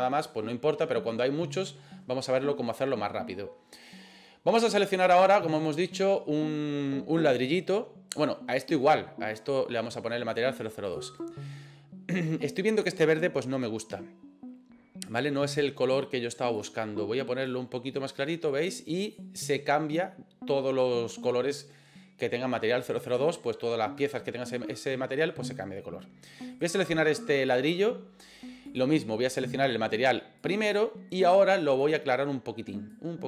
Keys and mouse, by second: 8.7 right click, 10.3 click, 16.5 click, 26.6 right click, 28.8-30.5 drag, 31.7 click.